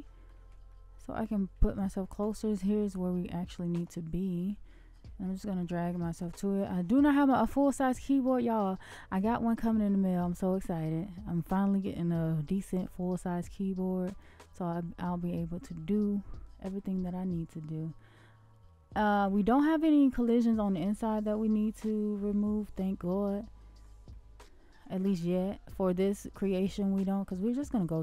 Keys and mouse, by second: 0.7-2.3 middle drag, 4.3-4.9 middle drag, 5.2 shift+middle click, 6.6 shift+middle click, 7.8 shift+middle click, 8.6 shift+middle drag, 9.3-9.8 middle drag, 10.2-11.0 shift+middle drag, 11.6-12.0 shift+middle drag, 14.1-15.0 shift+middle drag, 15.5-16.7 middle drag, 17.0-19.2 shift+middle drag, 20.1-23.8 middle drag, 24.1-24.8 shift+middle drag, 26.5-27.2 shift+middle drag.